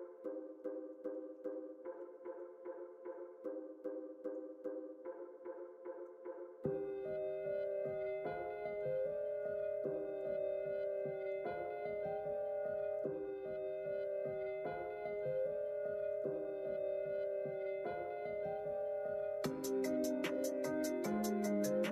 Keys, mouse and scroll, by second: 0.1 middle click, 1.1 alt+z, 1.9 KP_1, 2.1 KP_3, 2.8 KP_1, 4.4-6.0 drag, 7.7 click, 9.4 click, 11.3-12.9 shift+drag, 14.1 x, 16.0-18.6 drag.